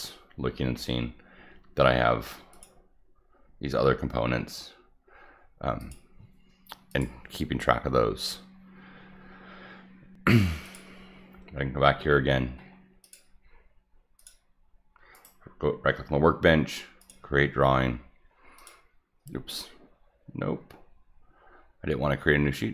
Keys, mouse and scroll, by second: 2.5 click, 5.7 click, 6.8 click, 10.7 click, 12.1 middle click, 12.1 scroll up 1, 12.7 middle click, 13.0 click, 14.2 click, 15.2 right click, 17.0 click, 18.6 click.